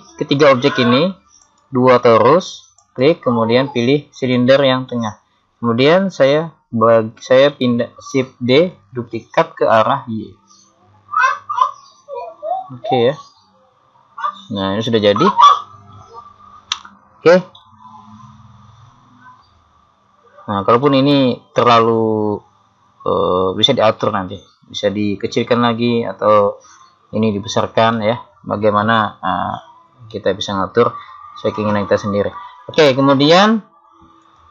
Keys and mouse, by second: 1.5-4.9 right drag, 4.9 middle click, 5.9 middle click, 6.3 KP_3, 8.8 shift+d, 13.5 middle click, 18.1-22.8 middle drag, 28.1-32.1 middle drag, 32.8-34.5 middle drag.